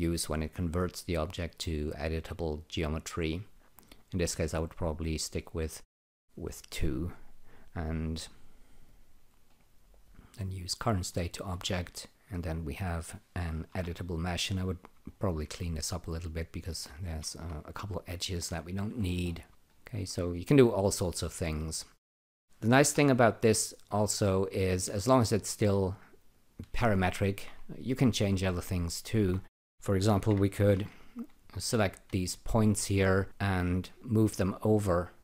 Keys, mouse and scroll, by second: 5.6 click, 6.8 click, 8.9 click, 9.4 right click, 10.8 click, 12.1 click, 12.4 click, 12.9 click, 13.7 Delete, 14.4 click, 15.0 alt+right click, 16.6 click, 16.7 double click, 17.2 shift+., 17.9 click, 18.1 double click, 18.3 shift+., 18.9-19.5 scroll down 10, 19.5 alt+click, 19.7 alt+right click, 22.0 click, 22.8 Delete, 24.2 click, 25.6 alt+shift+click, 26.3 alt+shift+click, 26.9 alt+shift+click, 28.1 click, 28.7 alt+click, 30.0-31.2 typing, 31.5 click, 33.3 click, 35.0 click.